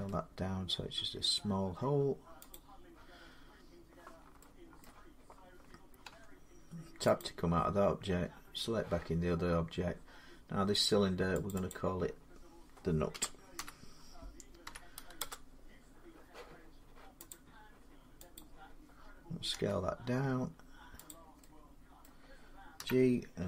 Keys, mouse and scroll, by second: 2.3 click, 3.1 scroll, 3.8 middle click, 4.6 shift+middle click, 5.9 shift+Tab, 7.0 click, 11.3 click, 11.5 click, 12.9-15.0 typing, 15.0 Return, 17.1 click, 18.2 click, 19.4 s, 20.9 click, 21.8 middle click, 22.6-23.4 typing.